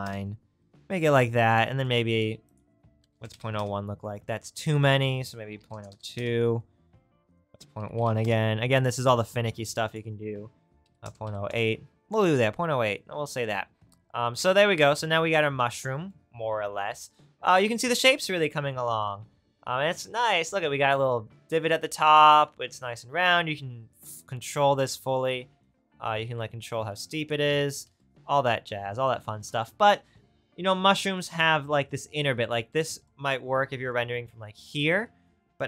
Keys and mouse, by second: 27.9 ctrl+z.